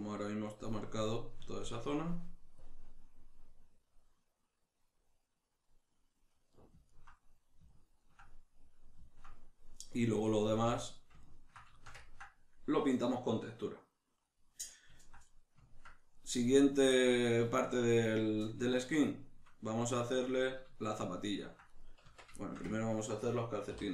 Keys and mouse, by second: 2.6-6.5 drag, 6.5-16.6 middle drag, 10.5 a, 16.6 right click, 16.9-21.6 shift+middle drag, 21.6 right click, 22.0 Tab, 22.4-23.9 shift+middle drag, 23.7 3.